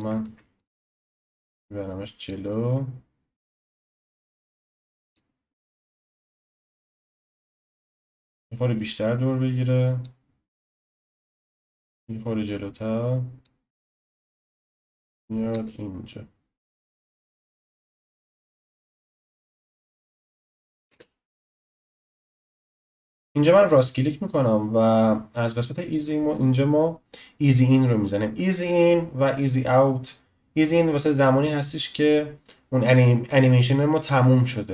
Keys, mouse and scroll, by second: 0.3 ctrl+z, 0.5 click, 1.2 click, 3.4-7.8 drag, 10.9 click, 11.8 click, 13.7 click, 14.1 space, 15.5 space, 16.9-20.9 drag, 20.9 space, 22.9 click, 23.7-34.7 right drag.